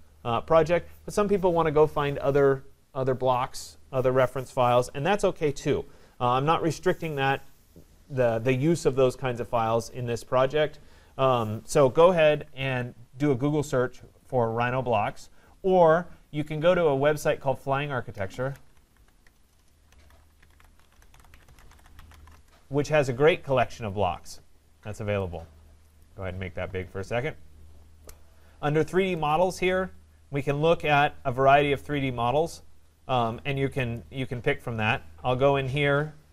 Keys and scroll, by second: 19.2 BackSpace, 22.3 Return.